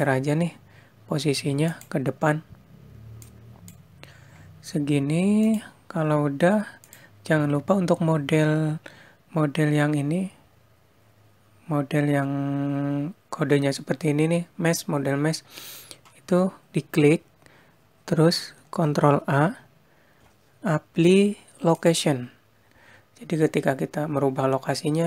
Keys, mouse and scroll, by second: 0.9 click, 6.8 click, 7.9 click, 18.7 ctrl+a.